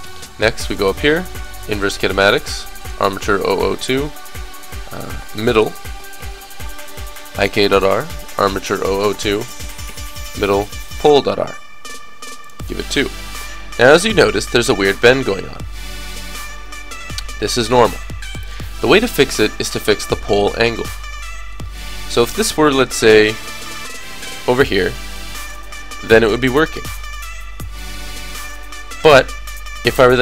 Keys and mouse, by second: 0.7-5.4 drag, 0.7 right click, 5.9 d, 7.8-10.8 drag, 9.8 d, 12.4 click, 13.3-14.3 middle drag, 14.3 click, 21.8-25.4 drag, 22.6-25.2 middle drag, 22.6-23.6 right drag, 24.6 right click, 28.9 Tab, 29.8 Tab, 29.8-30.2 drag.